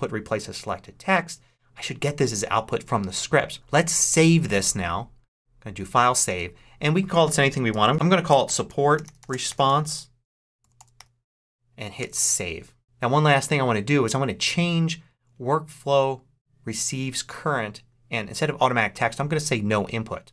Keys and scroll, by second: 7.4-11.4 typing, 11.9 Return.